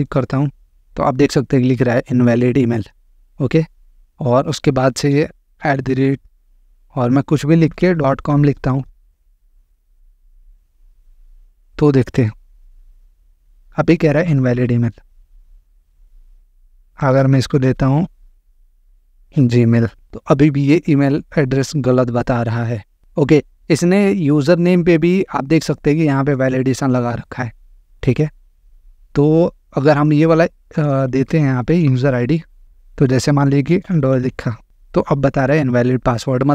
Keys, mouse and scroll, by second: 2.9 click, 5.4 shift+2, 7.3-10.5 typing, 12.2 click, 14.3 click, 15.4 click, 16.8-19.9 typing, 25.9-26.9 drag, 29.5-30.5 drag, 30.7 click, 31.7 ctrl+c, 32.6 Right, 32.6-34.5 typing.